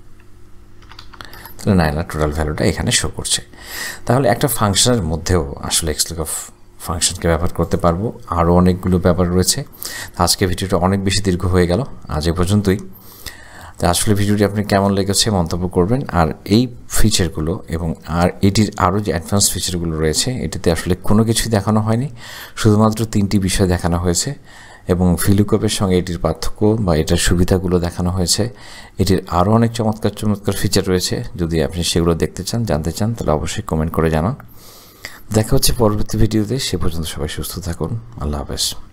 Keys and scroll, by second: 0.6-1.7 typing.